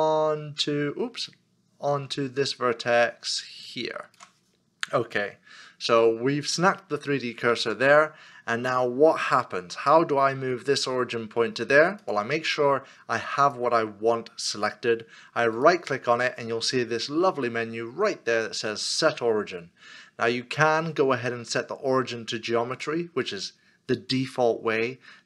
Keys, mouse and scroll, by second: 1.3 shift+right click.